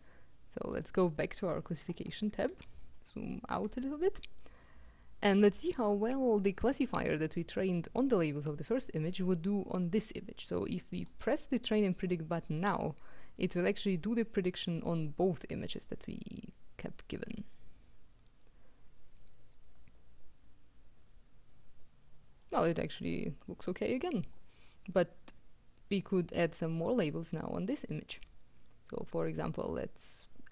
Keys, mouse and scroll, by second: 0.8 click, 2.9-3.6 ctrl+scroll down 2, 10.7-11.7 drag, 25.9-26.9 drag.